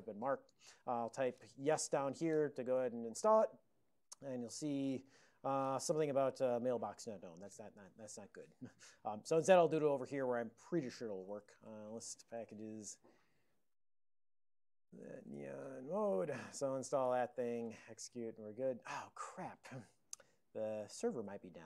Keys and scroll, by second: 9.0 super+j, 9.9 alt+x, 11.3-12.9 typing, 12.9 Return, 14.6-17.7 typing, 16.0 Return.